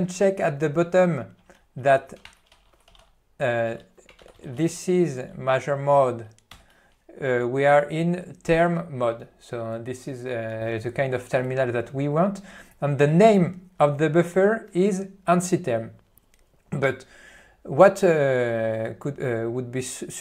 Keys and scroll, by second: 4.6 Tab, 5.6 Return, 6.6 Return.